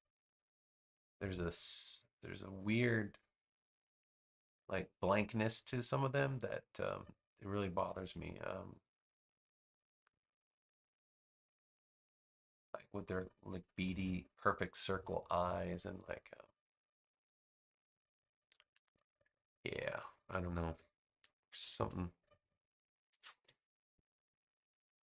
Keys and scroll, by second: 19.2 space.